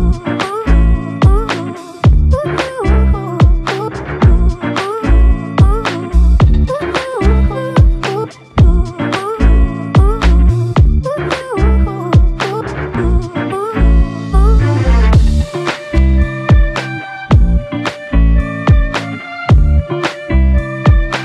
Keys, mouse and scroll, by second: 0.2 alt+click, 1.5 alt+click, 2.9-3.7 typing, 4.6 alt+click, 15.8 shift+click, 18.7 alt+click, 20.3 alt+click.